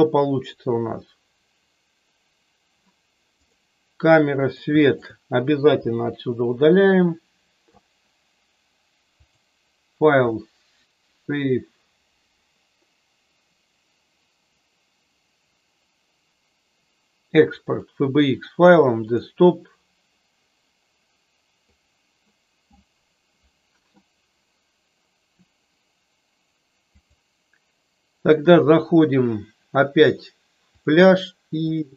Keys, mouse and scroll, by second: 4.8 shift+click, 5.8 Delete, 9.2-17.9 drag, 26.9-31.9 drag.